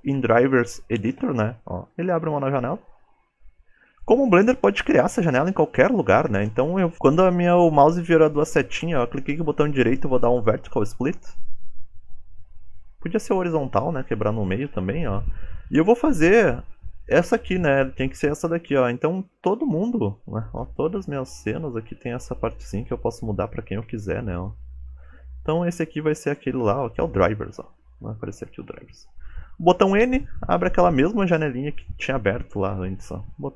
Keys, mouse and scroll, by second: 27.5-28.3 scroll down 6, 28.5 scroll down 4, 28.5 shift+middle click, 29.7 n.